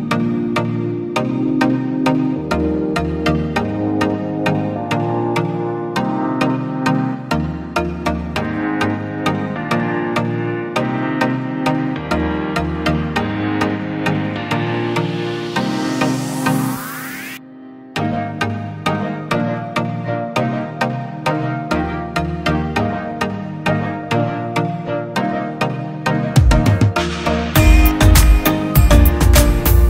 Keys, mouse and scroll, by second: 26.7 shift+click, 27.5 ctrl+t, 28.4 alt+shift+click.